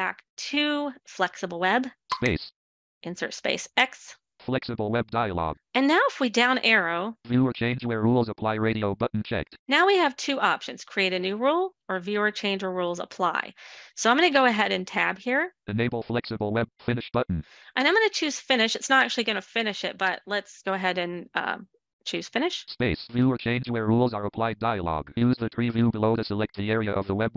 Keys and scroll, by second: 0.9 space, 3.8 x.